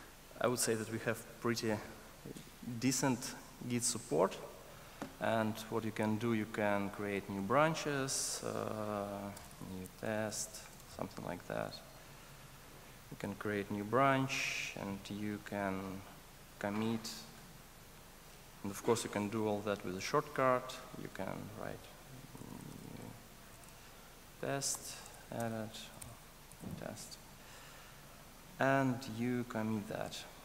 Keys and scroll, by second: 26.0 alt+BackSpace.